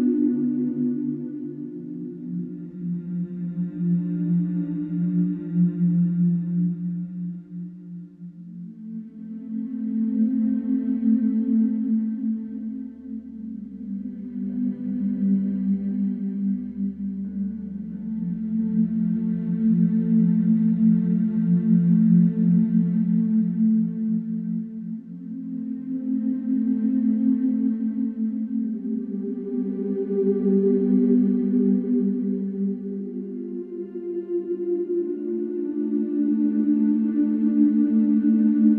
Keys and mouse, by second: 0.9 Delete, 2.1 ctrl+z, 3.1 ctrl+z, 3.2 ctrl+z, 4.8 ctrl+z, 5.6 Delete, 6.5 Delete, 6.5 ctrl+z, 6.9 middle click, 9.4 KP_Decimal, 13.0 Delete, 13.9 ctrl+z, 16.5 ctrl+z, 19.1 Delete, 23.0 ctrl+z, 23.6 ctrl+z, 24.8 ctrl+z, 25.4 ctrl+z, 25.9 Tab, 29.7-30.6 shift+middle drag, 30.6-31.0 right drag, 32.2 Tab, 36.7 ctrl+b.